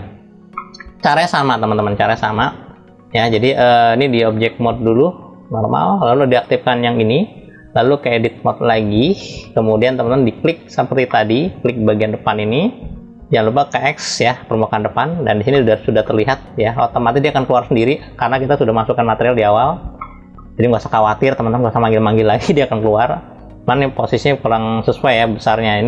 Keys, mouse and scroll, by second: 0.3-3.1 middle drag, 4.5-5.8 drag, 6.1 click, 8.7-10.7 drag, 10.7 middle click, 11.7 click, 15.1 middle click, 15.7-16.4 scroll up 3, 16.4 middle click, 19.2 scroll down 1, 19.6 middle click.